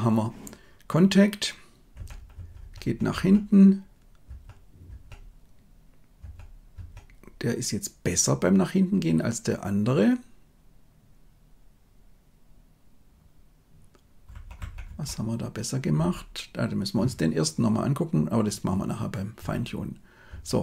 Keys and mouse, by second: 1.9 Right, 2.3 Right, 2.5 Right, 2.7 Right, 3.0 Right, 4.2 Right, 4.8 Right, 6.1 Right, 6.6 Right, 14.2 Left, 14.5 Left, 14.8 Left, 15.9 Right, 19.3 Right, 20.2 Right.